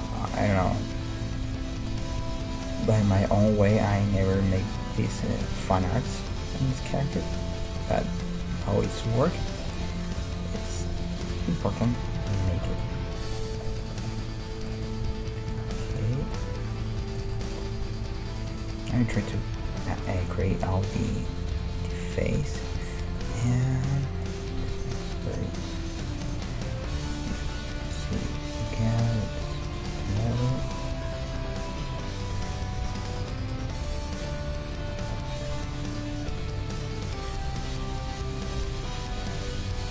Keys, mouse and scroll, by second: 0.6 ctrl+Tab, 1.1 middle click, 2.1 g, 3.0 middle click, 3.5-5.5 right drag, 3.6 g, 4.4 g, 5.5 middle click, 6.0-7.6 drag, 6.0 g, 7.6 middle click, 8.2-10.0 drag, 8.5 g, 9.4 middle click, 9.8 middle click, 10.2 e, 11.3 ctrl+Tab, 12.0-14.2 right drag, 12.6 f, 12.9 ctrl+Tab, 14.8-16.7 right drag, 15.1 g, 21.2 middle click, 21.2-23.3 right drag, 21.5 g, 22.6 g, 23.3-27.3 middle drag, 26.2-27.9 right drag, 27.0 KP_1, 28.4-29.9 scroll up 1, 28.6 g, 29.9 middle click, 29.9-34.1 right drag, 30.2 g, 31.1 g, 32.5 g, 33.7-37.0 middle drag, 34.3-36.0 right drag, 34.4 g, 36.4 g, 37.0-39.9 right drag, 37.5 g.